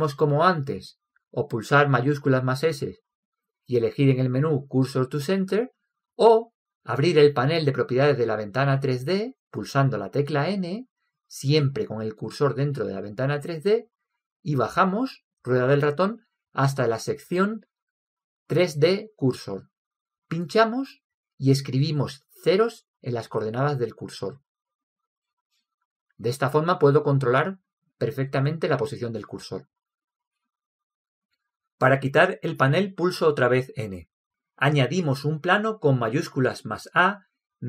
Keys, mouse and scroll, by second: 2.5 shift+s, 10.0 n, 11.3-13.1 drag, 16.7-18.4 drag, 18.5 click, 22.1 click, 25.5 ctrl+c, 26.2 ctrl+c, 26.9 ctrl+c, 34.3 n, 37.4 shift+a.